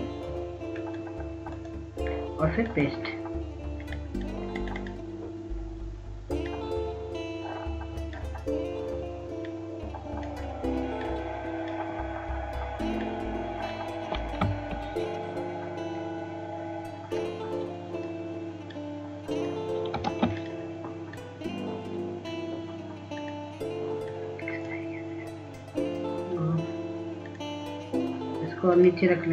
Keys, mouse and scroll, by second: 5.6-13.1 drag, 18.2-21.0 drag, 21.2 ctrl+space, 21.5-29.3 drag.